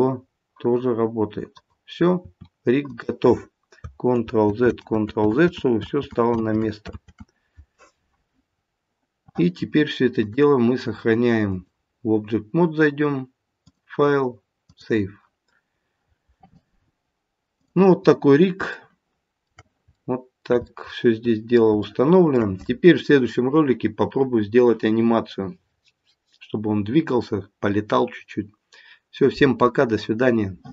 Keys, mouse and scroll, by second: 2.2 r, 4.2 ctrl+z, 4.8 ctrl+z, 5.8 ctrl+z, 5.9 ctrl+z, 6.3 ctrl+z, 6.9 ctrl+z, 8.5-9.8 scroll down 2, 10.2 click, 13.6 click, 15.7-16.5 scroll down 1, 17.6 click, 18.2-18.7 scroll up 2, 18.7 shift+middle click, 20.7 middle click, 21.8 shift+middle click.